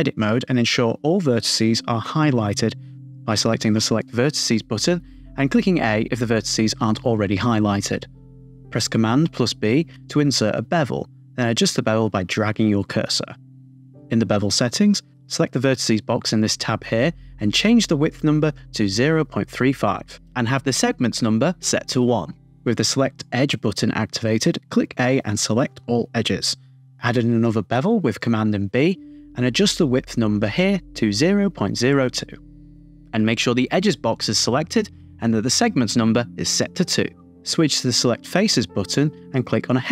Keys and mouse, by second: 0.2-1.4 drag, 9.0 super+b, 12.8 shift+click, 14.0 click, 17.1-19.4 drag, 23.2 click, 24.6 super+b, 25.2 a, 27.5 super+z, 28.0 a, 28.8 super+b, 30.6 shift+click, 31.2-37.7 drag, 39.6 KP_1.